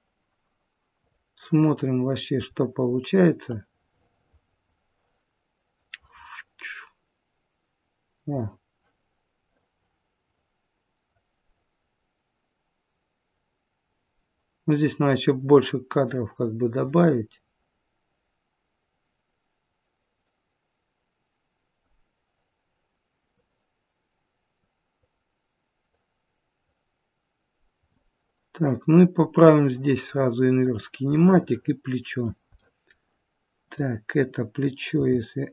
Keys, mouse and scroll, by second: 1.0 click, 1.9-3.4 scroll up 1, 3.4 click, 29.1-30.5 scroll up 1, 30.5 click, 30.5-31.0 scroll up 2, 31.0 middle click, 32.5 middle click, 33.5 click, 34.9 r.